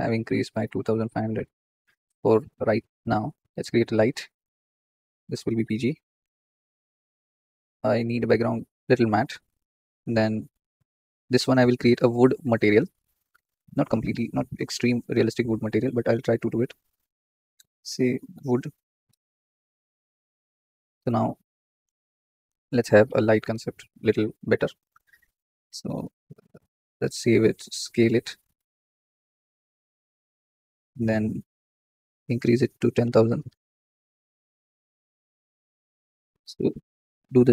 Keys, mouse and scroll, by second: 1.1 KP_0, 3.0 click, 3.9-10.9 drag, 12.0-12.5 scroll up 4, 16.8-19.0 drag, 19.0 o, 20.2 click, 20.9-21.7 scroll down 7, 21.7 click, 24.9 click, 26.0 click, 26.3 click, 26.7 Tab, 26.9 a, 27.1 s, 28.8 s, 30.2 Tab, 30.6 click, 34.1 KP_0, 34.3 scroll down 3, 34.3 KP_3, 35.0 z, 36.1 g.